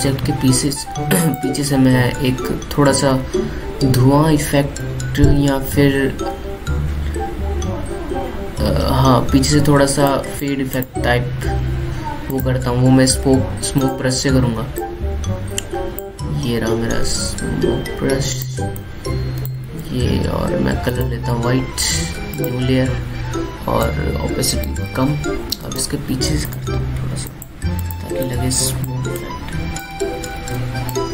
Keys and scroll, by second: 20.3 ctrl+z, 30.8 ctrl+z.